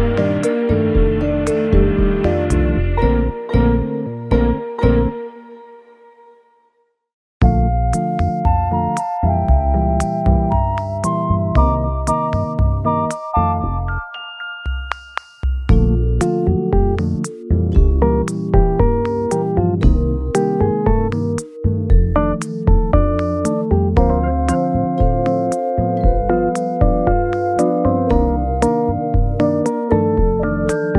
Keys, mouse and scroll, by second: 0.1-1.4 scroll up 7, 1.4-2.4 scroll down 5, 2.4-3.0 scroll up 1, 3.0-5.2 scroll up 1, 5.2-5.7 scroll down 1, 6.2 right click, 12.1 scroll up 1, 12.4 middle click, 13.6 shift+click, 14.0 shift+click, 15.3-15.9 scroll up 1, 18.0 w, 18.1 s, 19.9 Escape, 24.9 s, 30.7-30.9 scroll down 1.